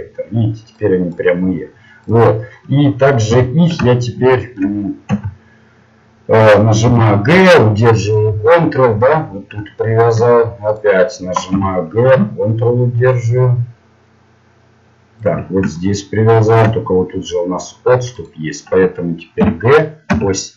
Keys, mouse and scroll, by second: 0.7 right click, 3.9 o, 6.8 o, 6.8 g, 10.7 right click, 11.5 g, 15.7-18.1 middle drag, 18.1-19.4 right drag, 19.4 g.